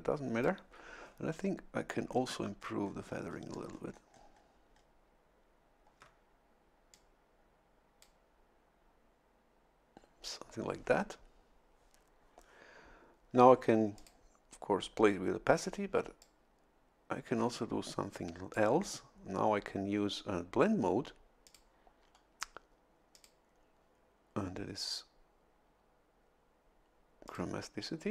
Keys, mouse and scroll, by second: 2.2-2.8 shift+scroll up 4, 4.7 shift+scroll up 2, 6.9-8.2 drag, 14.0 click, 16.2-18.7 drag, 21.4 click, 23.1 click, 27.3 click.